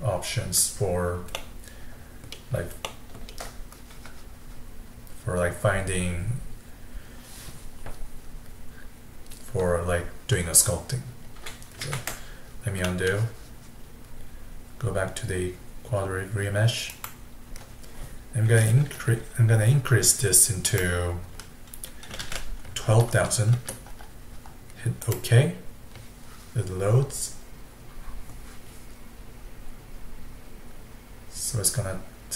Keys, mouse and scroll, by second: 1.4-6.0 middle drag, 11.9 ctrl+z, 12.9-14.5 middle drag, 16.9-20.1 drag, 23.2 KP_0.